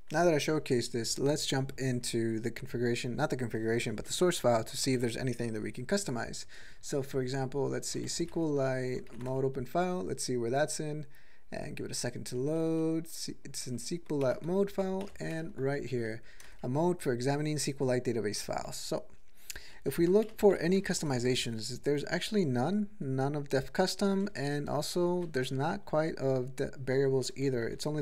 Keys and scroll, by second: 7.9-8.4 typing, 9.1 ctrl+n, 15.0 alt+<, 15.6 ctrl+=, 16.4 ctrl+space, 18.4 ctrl+g, 18.7-19.7 ctrl+n, 20.0 ctrl+s, 20.2 typing, 23.8-25.1 typing, 27.4 ctrl+n, 27.7 ctrl+p.